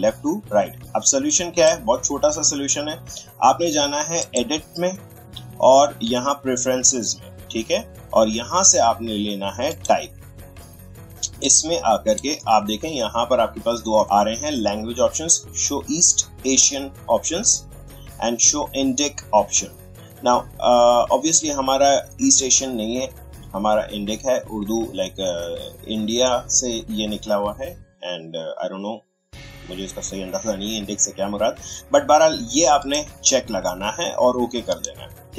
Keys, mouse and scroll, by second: 1.3-4.2 drag, 9.7-14.0 drag, 32.8-35.3 drag.